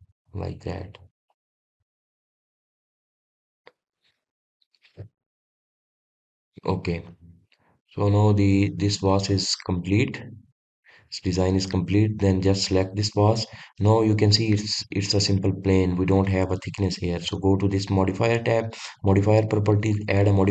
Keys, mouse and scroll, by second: 0.7 click, 1.2-1.9 scroll up 1, 1.9-2.4 scroll down 1, 2.4 click, 2.8-4.2 right drag, 4.2-5.0 middle drag, 5.0 click, 6.3 click, 7.7-10.0 middle drag, 10.0-10.5 scroll down 2, 10.5-11.4 middle drag, 11.4 click, 11.8-12.3 scroll up 1, 12.3 drag, 14.6 scroll up 2, 19.6 click.